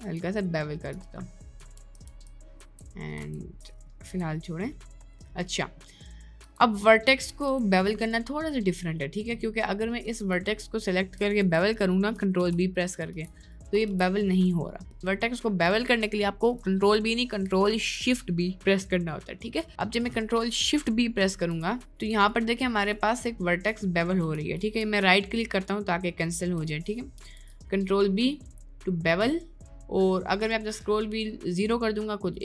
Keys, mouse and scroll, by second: 0.1 Tab, 0.5 middle click, 1.3 middle click, 2.1 ctrl+z, 2.5 ctrl+z, 3.3 Tab, 3.7 middle click, 4.1 Tab, 4.7 middle click, 5.6 middle click, 6.1 middle click, 6.5 Tab, 6.9 middle click, 7.2 Tab, 7.4 1, 7.9 middle click, 8.7 middle click, 9.7 middle click, 9.7 right click, 11.4 ctrl+b, 12.4 ctrl+b, 13.2 ctrl+b, 13.9 ctrl+b, 21.3 ctrl+shift+b, 23.1 middle click, 24.0 shift+middle click, 24.8 ctrl+shift+b, 27.1 ctrl+shift+b.